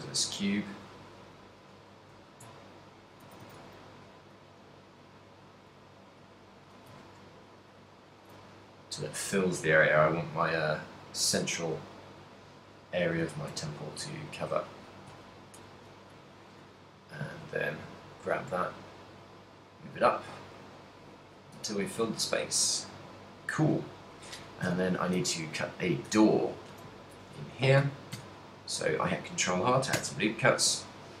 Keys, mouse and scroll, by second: 1.8 KP_7, 2.7 ctrl+middle click, 3.3 a, 3.6 a, 4.0 g, 6.9 click, 7.0 a, 7.3 b, 8.5 g, 12.9 click, 13.0 click, 13.5 a, 13.9 middle click, 15.1 KP_3, 16.0 b, 17.5 g, 20.2 click, 20.7 middle click, 22.0 z, 22.3 middle click, 23.7 z, 24.4 KP_3, 25.3 a, 26.1 KP_7, 27.3 ctrl+r.